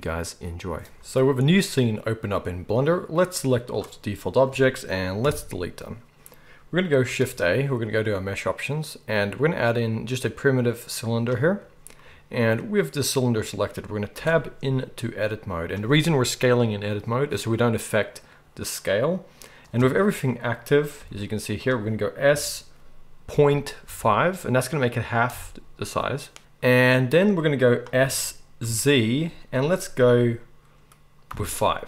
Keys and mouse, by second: 0.9-3.7 middle drag, 3.7-13.2 drag, 5.2 Delete, 7.0 shift+a, 13.2-15.0 middle drag, 14.2 Tab, 21.0 g, 22.3 s, 28.0 s.